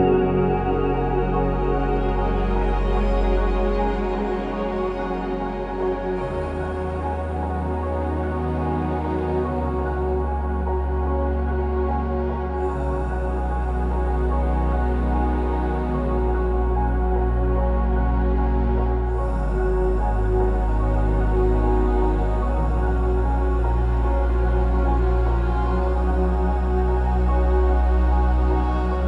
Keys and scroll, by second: 3.2 BackSpace, 9.9-14.3 typing, 11.7 ctrl+c, 11.7 ctrl+v, 12.4 Return, 14.8 ctrl+c, 14.8 ctrl+v, 18.4 Escape, 21.8 Escape, 21.8 Escape, 22.1 BackSpace, 22.6 BackSpace, 22.8 BackSpace, 23.1 Escape, 24.3 Escape, 25.2-25.8 typing, 25.3 Return, 25.4 Escape, 25.6 Escape.